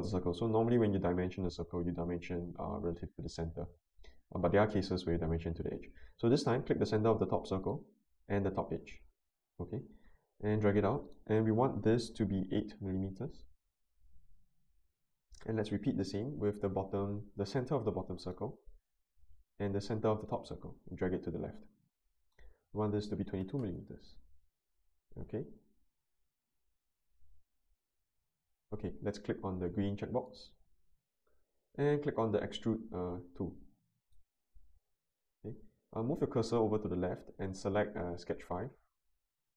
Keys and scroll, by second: 12.5 8, 12.8 Return, 23.2 2, 23.4 2, 23.5 Return.